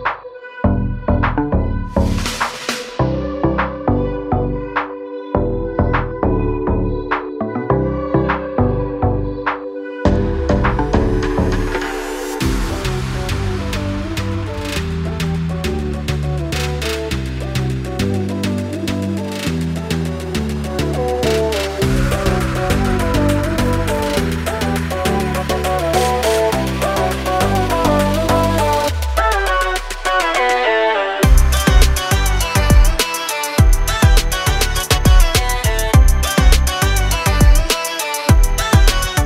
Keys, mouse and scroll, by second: 1.8 right click, 2.4 click, 5.9 click, 19.7 scroll down 1, 20.7 scroll down 1, 22.0 scroll up 1, 23.3 alt+scroll down 1, 24.9 click, 26.3-26.7 alt+scroll up 2, 27.2 alt+scroll down 1, 29.3 click, 33.0 ctrl+z, 34.5 click, 35.0-35.4 alt+scroll up 2, 35.4 click.